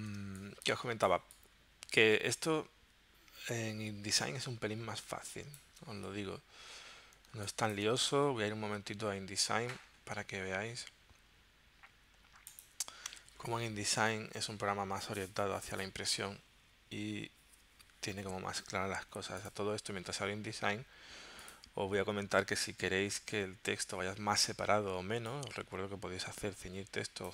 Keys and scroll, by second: 0.2 space, 7.3 space, 8.2 super+Tab.